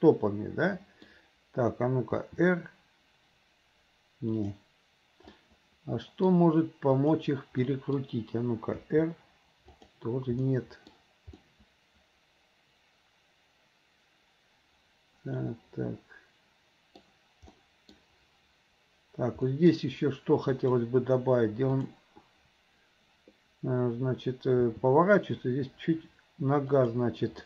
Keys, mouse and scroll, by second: 3.2 r, 5.4-6.4 middle drag, 7.0 click, 7.7-8.0 middle drag, 10.0 r, 10.4-10.9 middle drag, 11.4-17.0 middle drag, 17.6-18.0 middle drag, 19.6 middle click, 20.6 click, 21.8 click, 25.7 g.